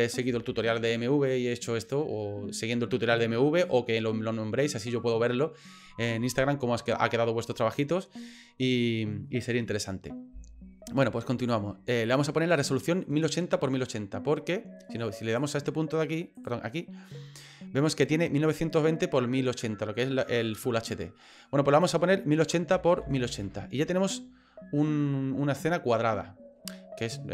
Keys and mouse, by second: 15.4 click, 21.8-23.9 drag.